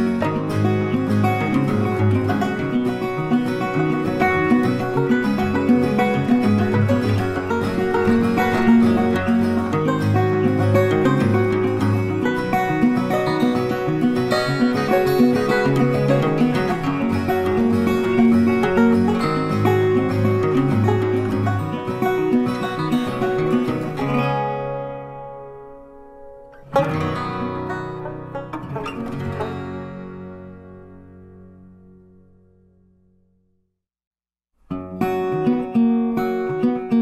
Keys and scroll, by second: 8.2 ctrl+t.